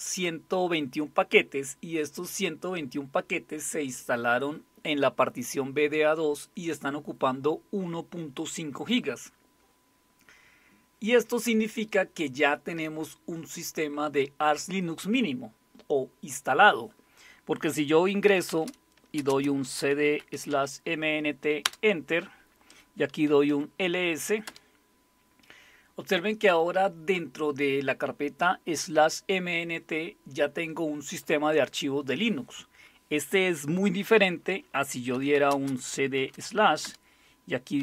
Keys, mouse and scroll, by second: 18.0-20.8 typing, 21.6 Return, 23.3-24.0 typing, 24.4 Return, 34.9-37.8 typing.